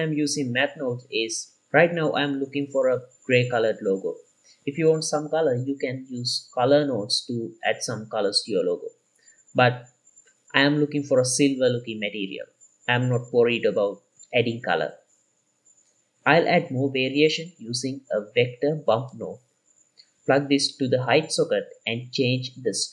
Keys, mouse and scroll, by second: 2.6-8.4 shift+drag, 9.4-10.8 middle drag, 9.4-10.1 scroll down 2, 11.0 click, 12.2 middle click, 12.7 click, 13.0-13.8 middle drag, 14.0 middle click, 14.0-14.3 scroll down 2, 15.0 click, 15.0-15.3 scroll up 5, 15.7 middle drag, 15.7 scroll down 1, 16.4 shift+a, 19.4-21.1 drag, 21.7 ctrl+shift+click, 22.3 scroll up 2, 22.5 middle click, 22.7 shift+middle click.